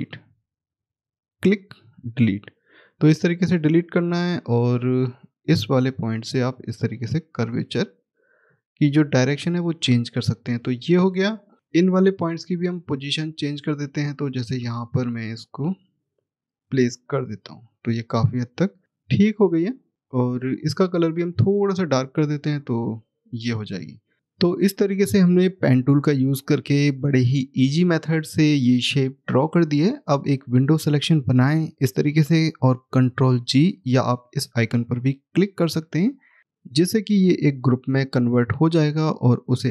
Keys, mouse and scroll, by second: 1.3 click, 1.8 Delete, 3.2 click, 4.1 middle click, 4.3-5.9 scroll down 1, 5.9 click, 8.7 middle click, 9.9-11.1 scroll down 1, 12.6 scroll up 1, 12.6 click, 17.0-17.7 scroll down 1, 18.4 middle click, 20.3 click, 22.5-23.0 scroll down 1, 23.6 click, 24.1 middle click, 30.0 click, 35.3 click, 36.0 scroll down 1, 37.0 middle click, 38.2-38.7 scroll down 1.